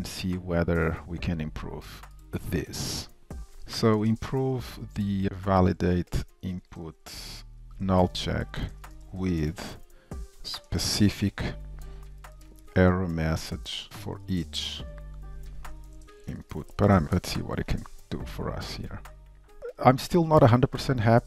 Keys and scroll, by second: 19.6 Return.